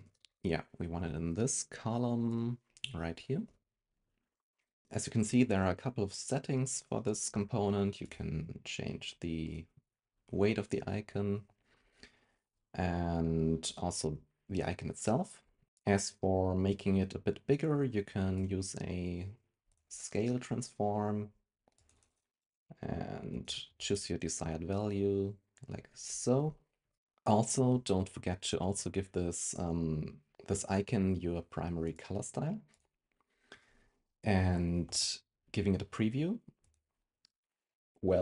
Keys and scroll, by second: 0.1 super+x, 3.4 super+v.